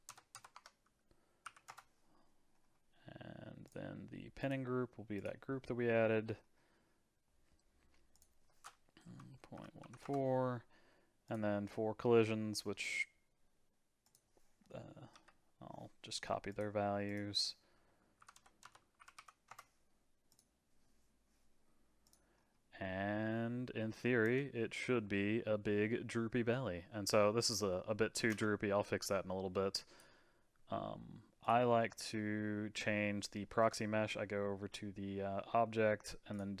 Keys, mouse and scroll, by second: 0.3 KP_0, 2.5-3.6 scroll down 2, 3.6-6.2 drag, 6.2-8.1 scroll down 4, 8.1-11.1 drag, 11.2 click, 11.6-14.0 scroll down 4, 14.0-16.6 drag, 17.0-18.6 drag, 18.6 KP_0, 20.3-22.1 drag, 22.3-22.8 scroll down 2, 24.2 space, 28.3 space, 29.0-31.5 drag, 36.3-36.6 drag.